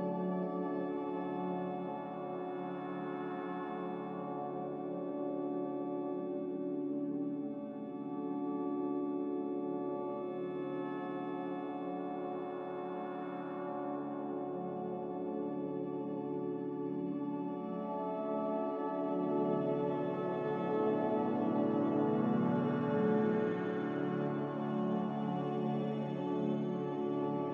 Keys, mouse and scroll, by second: 0.2 z, 2.2-4.1 typing, 4.2 Return, 5.2 ctrl+z, 6.3 ctrl+z, 7.4-10.7 typing, 20.0 n, 23.2 b.